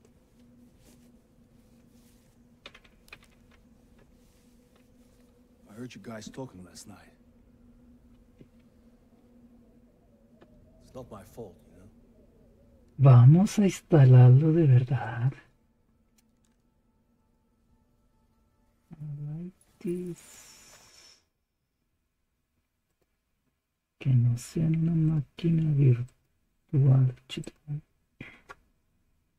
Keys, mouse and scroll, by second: 3.0-6.2 typing, 6.3 Return, 8.0-9.1 typing, 10.3 Return, 12.1 typing, 15.0-16.7 drag, 17.3-18.9 drag, 20.2-21.5 drag, 22.9 click, 25.1 click, 26.0 click, 27.3-29.0 drag.